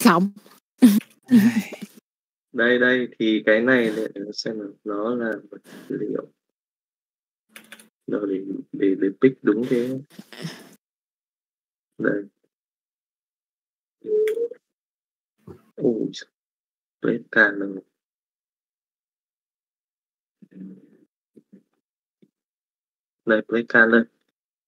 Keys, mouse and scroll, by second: 0.1 middle click, 1.3 middle click, 2.3 middle click.